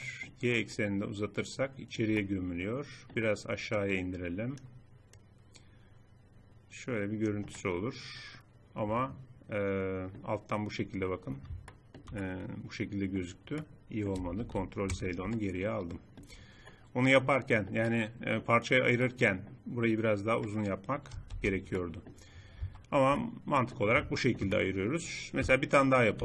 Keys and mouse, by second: 2.2 click, 2.4 middle click, 3.0 middle click, 3.8-7.0 drag, 7.5 middle click, 8.5-9.5 middle drag, 12.2-13.2 middle drag, 14.4 ctrl+z, 18.0 click, 21.2 ctrl+z, 22.6 Tab, 25.4 KP_7.